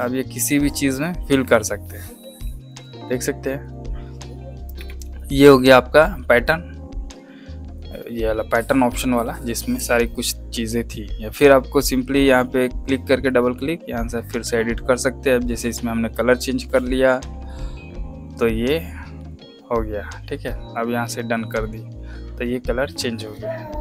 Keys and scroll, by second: 4.6 v.